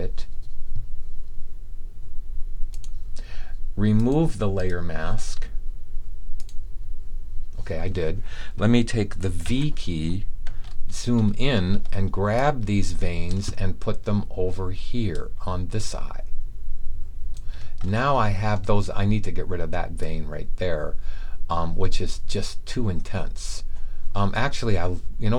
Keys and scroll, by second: 9.4 v.